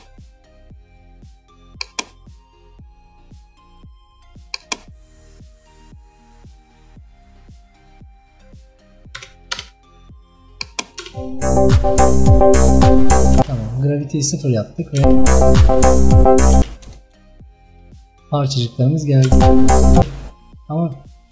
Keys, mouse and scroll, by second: 11.1 space, 13.5 space, 16.8 KP_0, 17.2 KP_0, 19.3 space, 20.1 space, 20.8-21.3 scroll up 5.